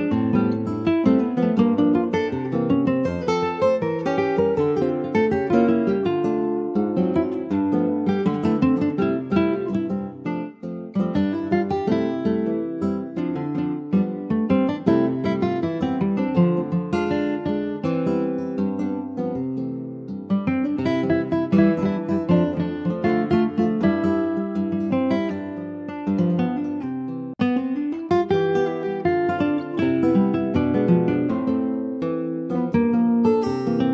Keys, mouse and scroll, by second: 2.2 middle click, 2.6 click, 2.9 middle click, 3.4 scroll up 1, 3.6 ctrl+s, 3.8 click, 4.5 click, 6.5-8.0 drag, 9.4 click, 11.8 g, 13.4 Delete, 13.8 click, 14.2 middle click, 15.2 ctrl+s, 15.7 click, 16.9 click, 18.9 alt+middle click, 19.2 alt+middle click, 19.8 alt+middle click, 20.4 alt+z, 20.7-21.0 scroll up 4, 21.0 shift+middle click, 21.4 shift+scroll up 1, 22.0 alt+middle click, 22.8-23.4 scroll up 2, 23.0 shift+middle click, 24.1 click, 26.7 scroll down 2, 27.3 alt+middle click, 27.9-28.4 scroll down 2, 28.4-29.4 shift+middle drag, 29.4 ctrl+s, 29.9 s, 31.9 s.